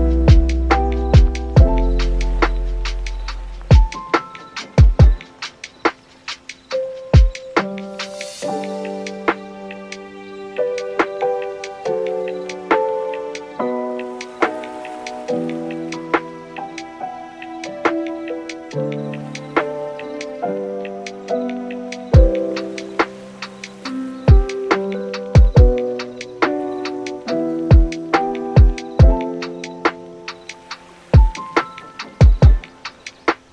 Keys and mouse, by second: 1.9 click, 6.4 click, 6.9 super+s, 8.1 click, 8.5 click, 11.3 click, 11.4 click, 15.5 click, 15.7 click, 15.8 click, 18.1 super+s, 20.4 click, 23.2 click, 23.6 click, 26.1 click, 27.6 super+s, 27.7 super+s, 28.9 super+s, 30.6 super+s, 31.0 click, 31.1 click, 31.9 click, 32.1 click, 32.5 click, 32.8 click, 33.3 click.